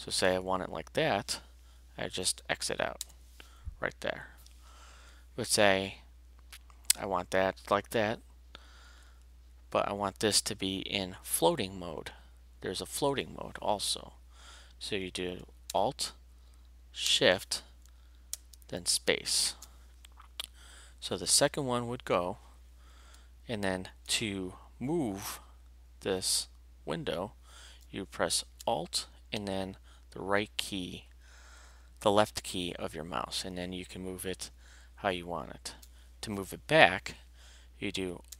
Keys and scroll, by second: 3.0 Escape, 18.3 alt+shift+space.